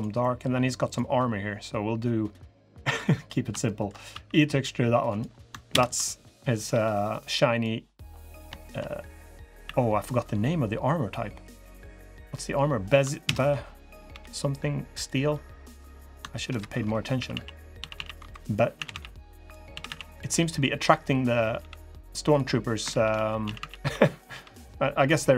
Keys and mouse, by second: 0.0 click, 3.4 shift+drag, 3.9 e, 5.5 ctrl+KP_Add, 6.5 g, 8.0 click, 8.4 shift+click, 9.4 e, 13.0 ctrl+KP_Add, 13.8 g, 16.2 ctrl+KP_Add, 19.7-21.3 drag, 19.7 a, 19.7 b, 21.3 g, 22.6 ctrl+z, 23.2 a, 23.3 a, 23.6 b, 24.0 g.